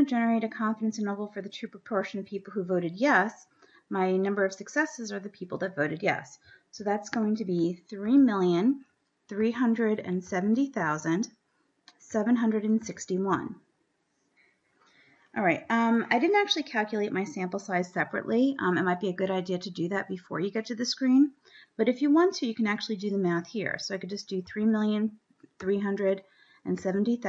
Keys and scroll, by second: 8.6 3, 9.9 3, 10.5 7, 11.3 0, 12.7 7, 12.9 6, 13.8 1, 16.3 Down, 25.0 3, 26.3-27.2 typing.